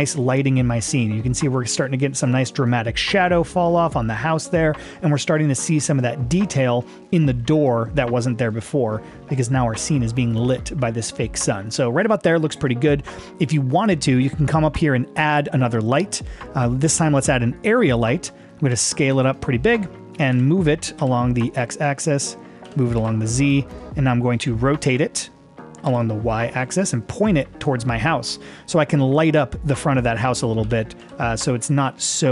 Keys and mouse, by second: 14.6-17.7 drag, 18.8 s, 20.3 g, 21.3 x, 22.7 g, 23.0 z, 24.4 r, 25.0 x, 25.9 y, 30.7 g, 31.1 z, 32.1 click.